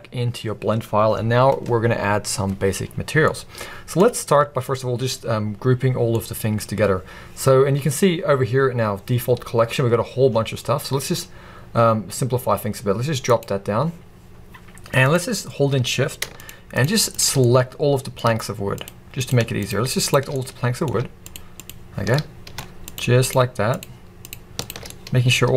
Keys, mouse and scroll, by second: 0.0-3.3 drag, 3.3-13.3 middle drag, 4.0-4.6 scroll down 2, 4.6-5.8 scroll down 1, 5.8-6.2 scroll down 1, 6.7-9.6 scroll up 2, 9.9-10.3 scroll down 1, 10.3-13.3 scroll up 1, 13.3 click, 15.0 click, 16.4 shift+click, 16.8 shift+drag, 17.1 shift+click, 17.4-18.8 middle drag, 18.8 shift+click, 19.2 shift+click, 19.6 shift+click, 20.0 shift+click, 20.3-21.2 middle drag, 21.2 shift+click, 21.6 shift+click, 22.1-22.9 middle drag, 22.9 shift+click, 23.2-23.8 shift+drag, 24.3 drag, 24.6 shift+click, 24.9-25.5 middle drag.